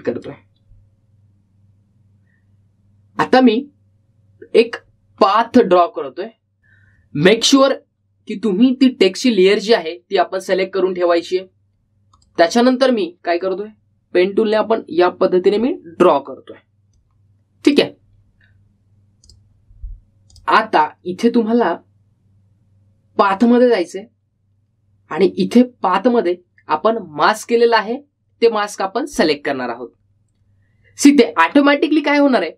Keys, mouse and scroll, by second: 0.0-0.3 typing, 2.9-3.7 typing, 13.0-13.8 typing, 13.3-20.4 drag, 24.2-25.0 typing, 24.5 click, 27.0 click, 30.3 click.